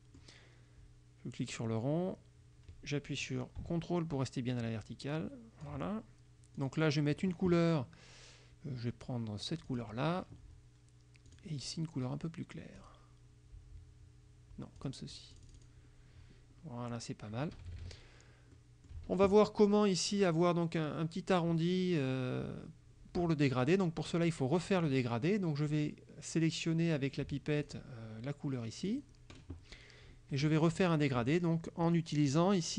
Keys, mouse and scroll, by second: 1.6-6.0 drag, 6.7 click, 9.8 click, 11.4 click, 12.9 click, 14.9 click, 15.4 click, 17.6 KP_Subtract, 18.6 middle click, 23.6 click, 27.7 click, 29.0 click, 32.3 click.